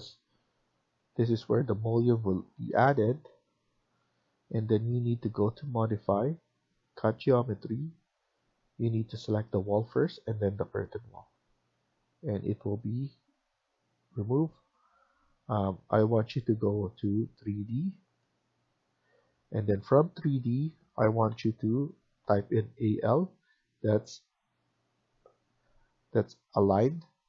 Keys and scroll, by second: 2.7 Escape, 3.1 Escape, 11.6 Escape.